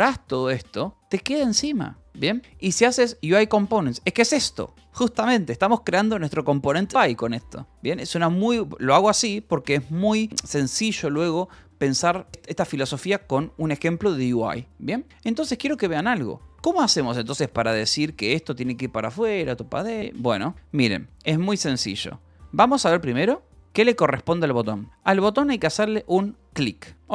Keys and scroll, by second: 6.9 k, 14.7 j, 15.1 k, 16.4 h, 17.2 j, 17.8 k, 18.1 j, 18.4 Escape, 21.5 ctrl+j, 22.3 ctrl+j, 23.0-24.5 typing, 25.6 h.